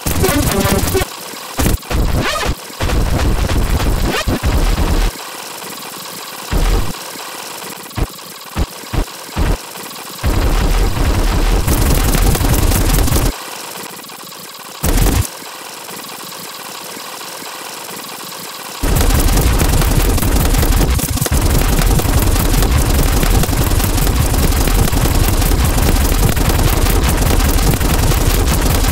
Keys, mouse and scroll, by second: 0.0-5.0 typing, 0.2-0.9 scroll down 2, 0.9-1.2 scroll down 2, 1.0 click, 1.3 click, 1.5 click, 2.5 click, 2.6 Delete, 2.7 click, 2.9 scroll up 2, 4.2 click, 4.4 click, 5.2 scroll down 4, 5.2 middle click, 5.4 middle click, 5.6 click, 5.9 middle click, 5.9-6.5 scroll up 4, 6.0 middle click, 6.1 click, 6.3 click, 6.5 space, 6.8 space, 6.9 click, 7.4 ctrl+click, 7.8 click, 7.9-10.2 typing, 8.2 scroll up 2, 9.1 ctrl+scroll up 4, 9.7 ctrl+click, 10.0 click, 10.4-11.6 scroll down 1, 11.6 click, 12.4 right click, 12.6 g, 12.7 scroll down 1, 13.2 space, 13.5 ctrl+click, 14.0 click, 14.3 s, 14.6 alt+click, 15.2 space, 15.2 scroll down 2, 15.4 right click, 15.5 ctrl+click, 16.0 click, 16.5 ctrl+click, 16.6 ctrl+z, 17.4 click, 17.6 ctrl+z, 17.7 ctrl+click, 18.0 click, 18.2 shift+click, 18.5 ctrl+click, 18.8 space, 18.9 scroll down 2, 21.1 click, 21.4 click, 21.6 scroll down 2, 21.8 click, 22.0 click, 22.3 click, 22.6 d, 22.8 n, 23.4 click, 23.5 click, 23.8 click, 24.0 click, 24.1 click, 24.5 click, 24.8 click, 24.9 click, 25.0 e, 25.3 click, 25.5 click, 25.7 click, 25.9 click, 26.1 click, 26.4 click, 26.6 click, 27.1 middle click, 27.3 click, 27.5 click, 27.8 click, 28.0 click, 28.3 click, 28.5 click, 28.7 click.